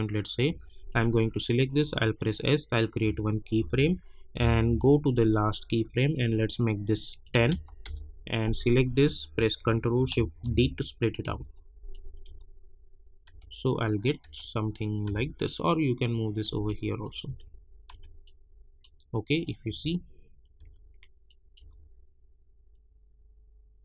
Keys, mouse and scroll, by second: 1.8 s, 2.7 click, 3.5-5.0 typing, 5.1-7.2 drag, 7.8 Return, 9.6 click, 10.4 ctrl+shift+d, 11.9 click, 12.2 space, 13.8 click, 14.3 space, 15.8 click, 17.2 space, 18.2 click, 19.6 space, 21.2 click, 21.6 space.